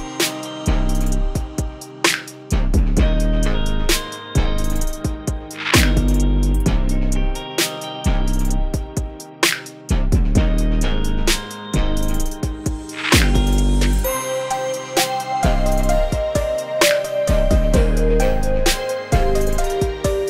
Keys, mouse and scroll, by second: 0.4 click, 1.3 space, 1.3 click, 1.5 space, 1.6-2.4 drag, 2.9-3.2 click, 3.7 space, 3.8 click, 4.0 space, 4.4-5.0 click, 5.4 click, 5.6 space, 5.7 click, 5.7 space, 5.9-6.5 click, 6.5 scroll down 1, 6.7 click, 7.0 g, 7.1-7.4 alt+click, 7.4 ctrl+z, 7.5-8.1 click, 8.3-8.8 drag, 10.8 g, 11.0-11.4 alt+drag, 13.3 v, 13.3-13.8 drag, 14.9 g, 15.0-15.6 alt+click, 15.6 v, 15.7 drag, 19.5 g, 19.8-20.2 click.